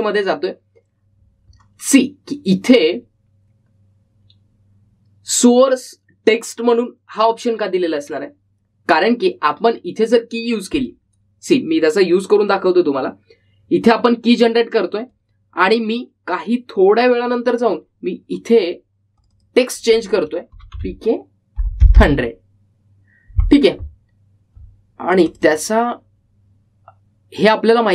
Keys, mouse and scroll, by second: 0.0-1.2 typing, 0.7 click, 11.6-12.4 typing, 11.9 click, 16.2-20.3 drag, 21.4-22.4 typing, 26.2 click.